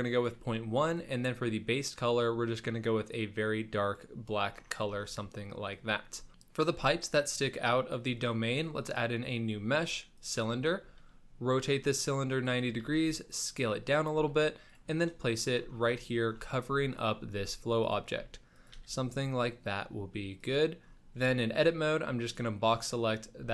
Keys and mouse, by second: 0.8 click, 5.2 shift+middle drag, 6.3-8.2 shift+middle drag, 10.8 r, 12.8 s, 14.1 g, 15.3 shift+middle drag, 16.2 shift+middle click, 16.6 s, 17.3 g, 18.2 s, 18.7 g, 21.2 Tab, 21.6 click, 23.3 g.